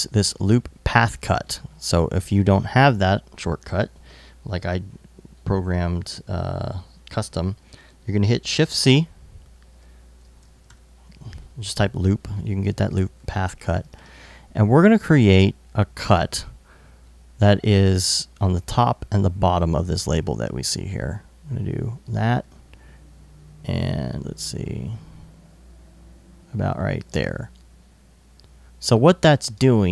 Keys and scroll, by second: 8.4 shift+c, 9.6-10.8 typing.